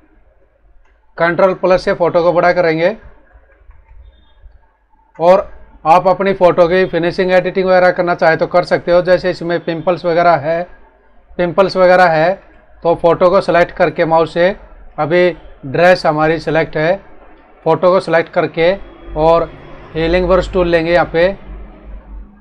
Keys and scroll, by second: 2.4 ctrl+=, 5.6 ctrl+=, 6.3 space, 16.1 space.